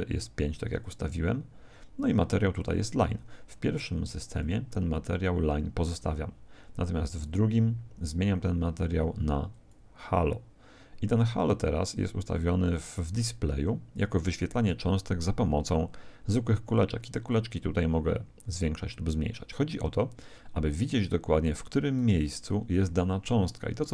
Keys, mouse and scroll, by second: 4.4 click, 7.2 click, 9.5 click, 17.3 click, 23.6-23.9 middle drag.